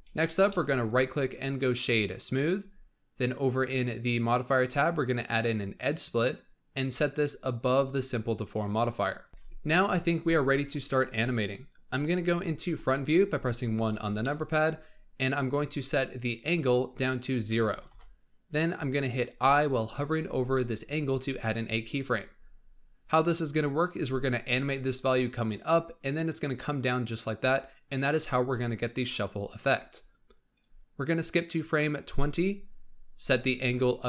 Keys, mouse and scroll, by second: 0.1 scroll down 2, 0.4-0.8 shift+middle drag, 0.8-2.4 right drag, 2.4-4.2 scroll up 2, 4.2 click, 5.8-7.8 drag, 9.3-12.6 middle drag, 12.6 KP_1, 13.6-14.1 scroll up 3, 14.1-16.5 shift+middle drag, 16.5-19.3 drag, 24.4-29.8 drag, 31.0-34.0 drag.